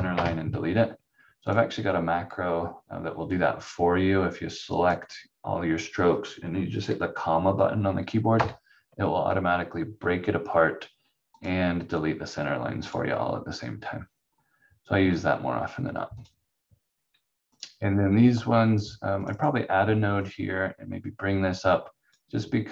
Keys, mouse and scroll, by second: 0.1 Delete, 1.4 click, 8.3 ,, 11.3 click, 14.3 scroll up 1, 16.1 click.